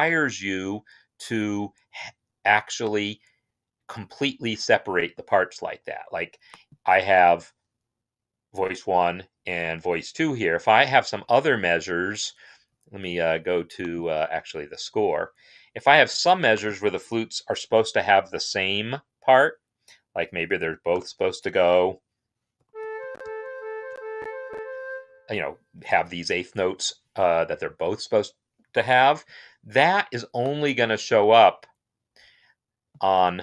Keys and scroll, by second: 16.9 n, 20.7 4, 22.1-24.5 typing, 24.7 Escape.